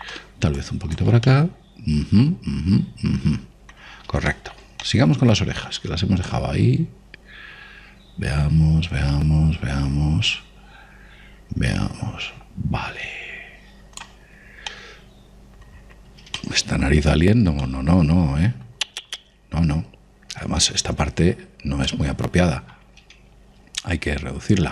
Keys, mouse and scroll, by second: 1.5 click, 2.2-4.0 middle drag, 5.2-8.8 middle drag, 7.2 click, 15.2-20.6 middle drag, 22.8-24.5 middle drag.